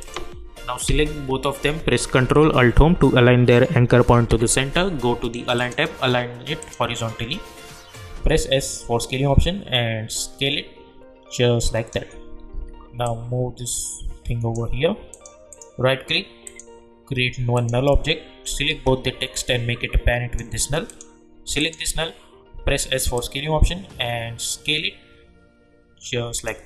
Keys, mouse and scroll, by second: 0.0 click, 0.8 ctrl+a, 4.1 ctrl+alt+Home, 5.5 click, 8.1 s, 9.0-12.5 drag, 12.5 v, 13.0-15.1 drag, 15.5 right click, 16.4 click, 18.7 ctrl+a, 19.4-20.9 drag, 22.5 s, 23.1-26.6 drag.